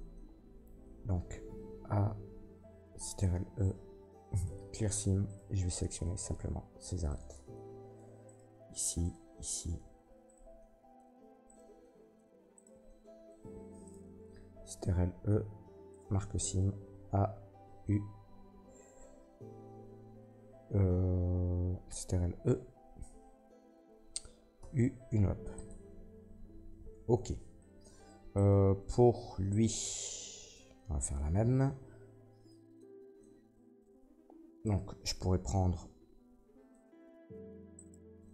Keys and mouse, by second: 1.5 a, 3.1 ctrl+e, 5.2 click, 5.2 right click, 5.9-7.3 drag, 7.0 ctrl+middle click, 7.0 ctrl+right click, 8.2 middle click, 9.0 shift+middle click, 10.2 shift+middle click, 10.4-11.4 drag, 11.4 shift+middle click, 11.5 shift+click, 12.5 shift+middle click, 12.7 click, 13.8 shift+middle click, 14.5 ctrl+e, 16.8 a, 17.6 y, 22.0 ctrl+e, 23.4-38.3 drag, 24.5 u, 28.3 middle click, 28.3 right click, 28.6 Tab, 29.4 middle click, 29.4 right click, 33.8 Tab, 34.5 alt+middle click, 34.5 alt+right click, 37.7 alt+shift+middle click, 37.7 alt+shift+right click.